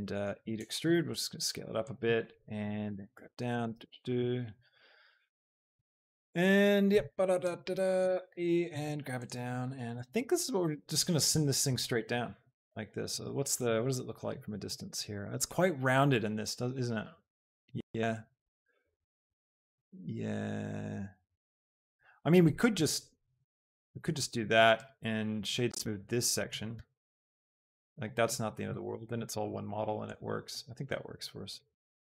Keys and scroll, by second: 0.4 Escape, 1.2 s, 3.0 z, 7.0 z, 8.1 e, 8.5 Escape, 8.9 z, 11.8 shift+g, 12.2 z, 26.9 Tab.